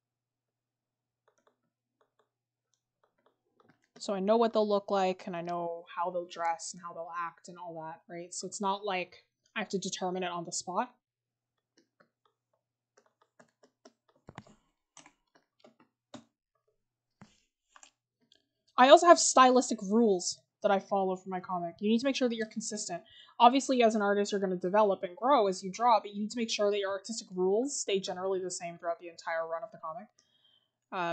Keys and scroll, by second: 9.5-9.9 scroll, 10.8-11.6 scroll up 1, 11.6 scroll, 13.2 scroll, 14.2 scroll.